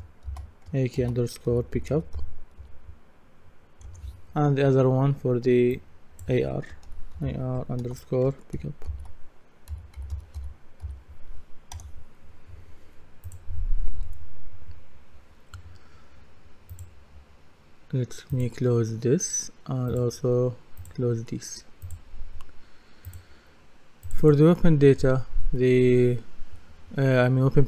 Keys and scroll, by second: 0.8-3.1 typing, 3.9 Return, 6.9 shift+a, 7.2 shift+r, 8.9-11.3 typing, 11.7 Return.